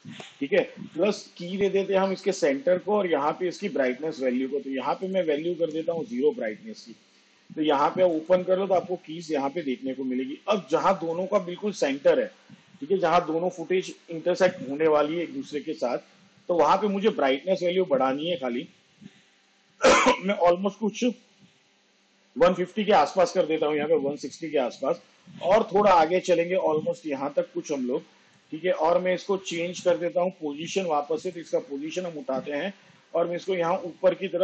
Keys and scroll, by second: 6.2 0, 9.2 u.